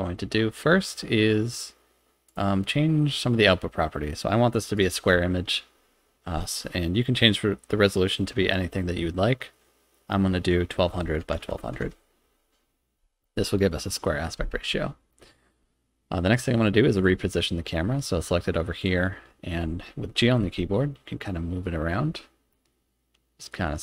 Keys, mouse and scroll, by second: 2.3 click, 4.8-14.9 drag, 11.0 0, 11.6 0, 16.9 click, 18.8 click, 20.4 g.